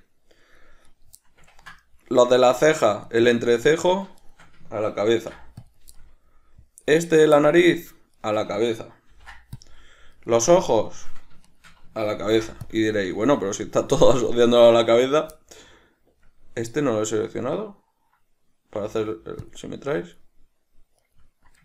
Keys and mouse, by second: 1.0 right click, 1.3-2.4 middle drag, 2.4 right click, 3.2 shift+right click, 4.3 shift+right click, 5.2 ctrl+p, 6.1-7.3 middle drag, 7.3 right click, 7.5 shift+middle click, 8.3 shift+right click, 9.3 ctrl+p, 10.3-11.7 right drag, 12.4 ctrl+p, 13.4-15.1 middle drag, 15.1 right click, 15.5-20.4 middle drag, 18.9 w, 21.1 right click.